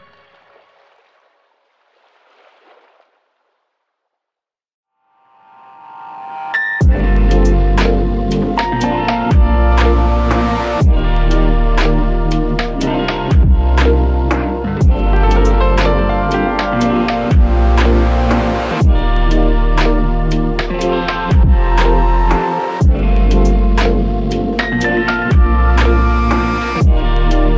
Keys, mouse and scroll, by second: 2.5 f, 12.5 double click, 15.8 click, 16.2 alt+click, 17.6 ctrl+click, 20.8 ctrl+click, 25.6 alt+click.